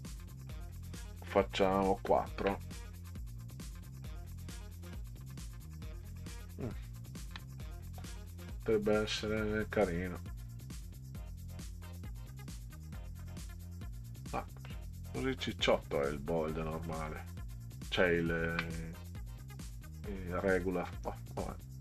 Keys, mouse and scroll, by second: 0.3 click, 2.0 4, 2.3 KP_Enter, 3.3 scroll down 2, 4.5 click, 6.8-7.1 ctrl+scroll up 4, 7.9 scroll up 2, 8.6 scroll up 2, 10.5 scroll up 2, 14.7-15.4 middle drag, 17.8-18.5 ctrl+scroll up 4.